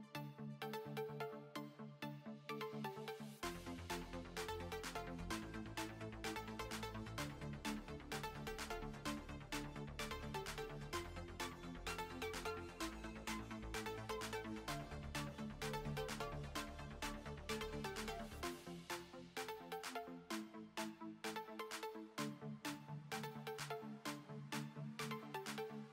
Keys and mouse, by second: 0.0-2.6 typing, 3.3 Tab, 5.7 KP_1, 6.0 ctrl+s, 6.8 z, 8.2-10.2 typing, 10.6 Tab, 11.2 b, 13.3 b, 14.2-16.6 middle drag, 19.6 middle click.